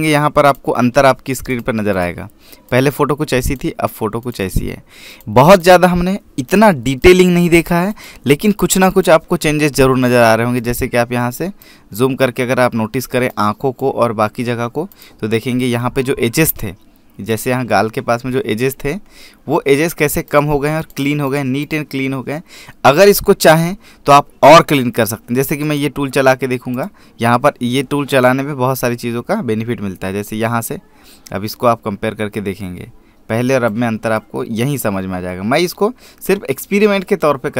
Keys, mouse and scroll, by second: 18.1 click, 18.6 scroll down 1, 18.9-19.5 scroll up 1, 20.0-21.1 scroll up 1, 21.1 click, 26.5 right click, 27.6 click, 29.6 click.